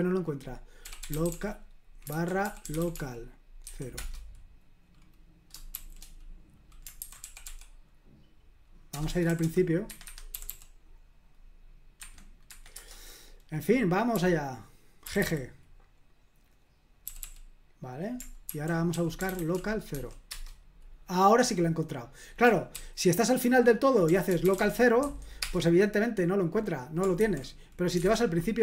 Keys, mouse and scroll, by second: 0.6-3.6 typing, 3.9 Return, 5.7 shift+g, 6.8-9.3 typing, 9.9 Escape, 10.0 Escape, 10.5 typing, 12.0 Escape, 12.5 Escape, 12.7 Return, 14.1 g, 15.0 g, 17.2 typing, 18.2-20.4 typing, 22.8 shift+g, 23.8-25.5 typing, 27.2 /, 28.0 BackSpace, 28.0 Escape.